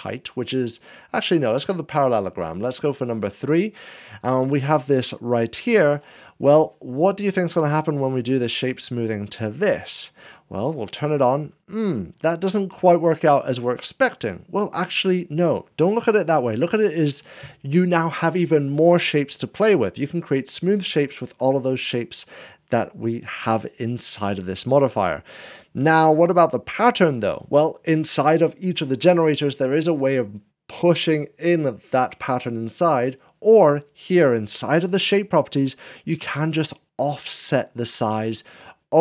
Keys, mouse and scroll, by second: 2.7-4.0 drag, 2.9 scroll up 1, 4.3 scroll down 1, 4.7 scroll up 1, 5.3-6.3 shift+middle drag, 5.5 scroll down 1, 7.3 scroll down 1, 10.6-11.6 drag, 36.5-39.0 drag.